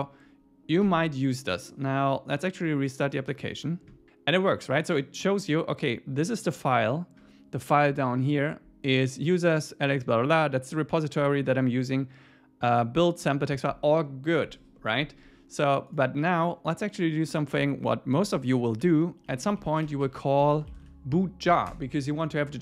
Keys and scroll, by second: 0.8 super+s, 18.8 Right, 19.3 Down, 19.8 Up, 20.0 Right, 20.4 Down, 21.5 Up, 21.7 Return.